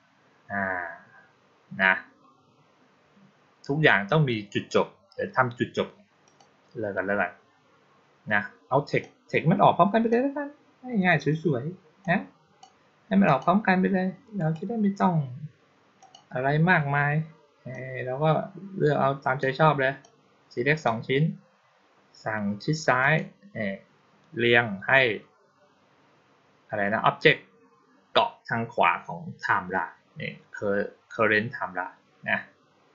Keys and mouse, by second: 6.1 click, 8.9-9.9 drag, 11.9-12.5 drag, 13.1 click, 14.2 right click, 15.9 click, 17.6-19.3 drag, 19.9-20.7 drag, 22.9 click.